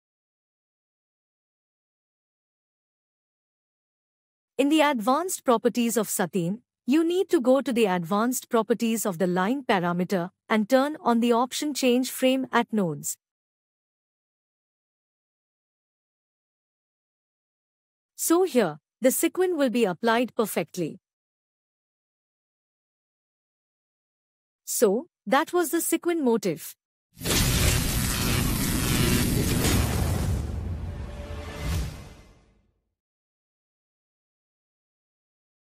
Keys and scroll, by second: 6.6 ctrl+Tab.